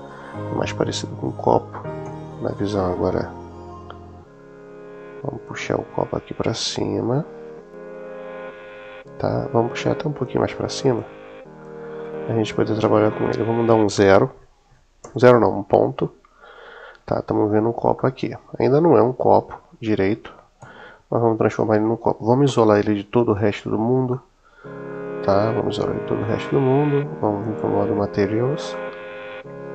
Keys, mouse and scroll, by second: 1.9 KP_1, 5.3-9.5 drag, 9.9 click, 10.8-11.5 drag, 14.8 KP_Decimal, 17.9-20.0 middle drag, 20.6 KP_1, 22.4 /, 24.0-25.8 middle drag, 27.3 click, 28.6-29.7 middle drag.